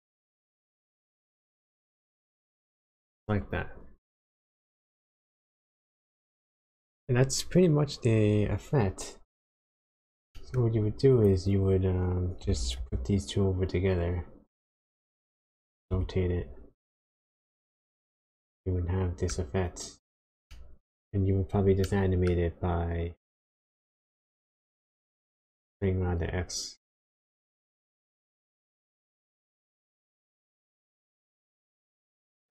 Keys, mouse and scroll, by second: 0.8 shift+click, 3.1 click, 3.8-4.6 scroll down 5, 4.6 middle click, 6.7 click, 9.8-10.1 scroll down 2, 10.3 shift+middle click, 11.1 click, 12.4 g, 15.9 r, 17.5 click, 18.2 shift+middle click, 20.5 shift+middle click, 21.8 middle click, 22.7-23.8 scroll up 5, 23.8 middle click, 25.6 shift+click, 30.0 click, 31.6 shift+click.